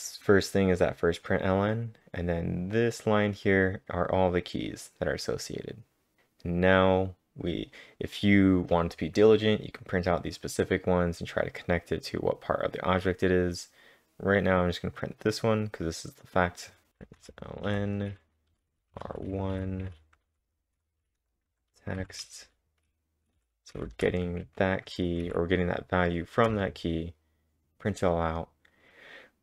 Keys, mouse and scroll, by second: 1.6-2.5 scroll down 3, 10.8 scroll down 1, 13.2 scroll down 1, 13.3 scroll down 2, 13.3 scroll up 1, 13.4-15.0 scroll down 1, 15.0 click, 15.1 double click, 16.4 click, 16.9-18.9 typing, 20.7-24.1 typing, 24.4 ctrl+`, 25.2 Up, 26.5 Return, 28.4-29.4 typing.